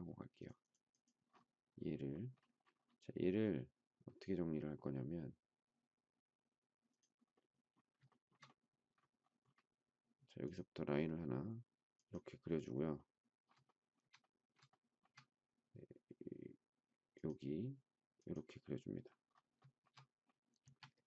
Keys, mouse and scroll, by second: 8.1 shift+middle click, 13.6 shift+middle click, 14.7 shift+middle click, 20.6 space.